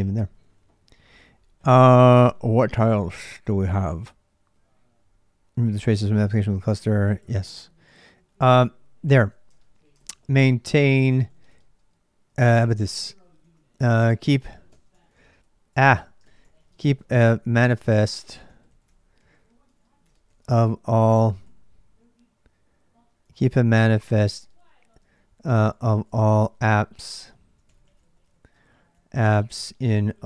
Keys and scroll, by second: 6.5 j, 7.9-21.2 typing, 22.8-30.2 typing.